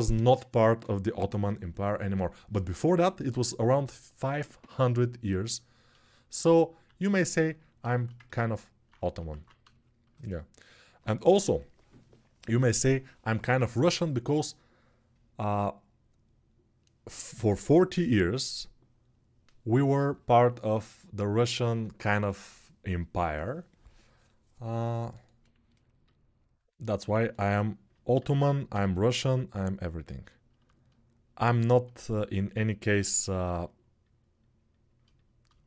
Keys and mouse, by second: 9.1 alt+q, 27.9 alt+q, 28.5 g, 35.3-35.6 alt+shift+right drag.